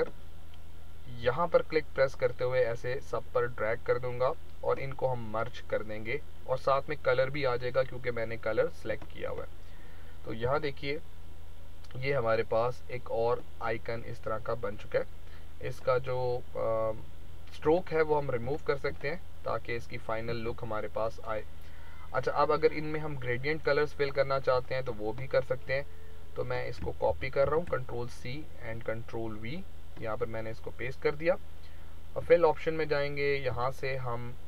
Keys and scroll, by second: 10.6 ctrl+-, 20.3 space, 27.0 ctrl+c, 27.4 ctrl+v.